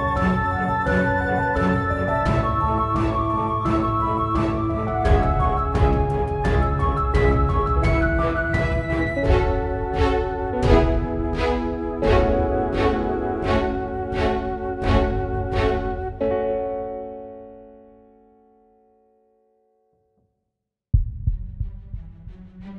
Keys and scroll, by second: 6.1-10.4 typing, 11.7-13.8 typing.